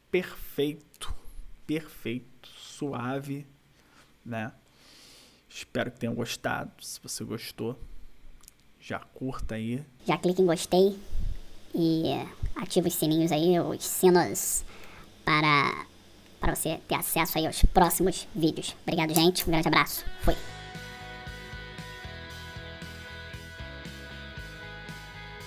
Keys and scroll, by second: 17.9 ctrl+=, 20.5 ctrl+=, 21.0-22.0 typing, 22.9 ctrl+=, 23.4 ], 24.3 ctrl+-, 24.4 ctrl+=, 24.6 \.